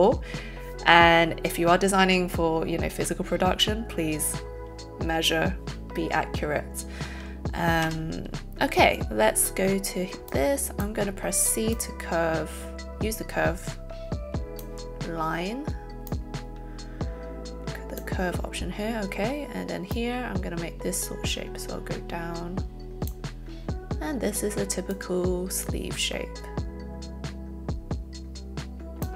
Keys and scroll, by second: 8.0 c.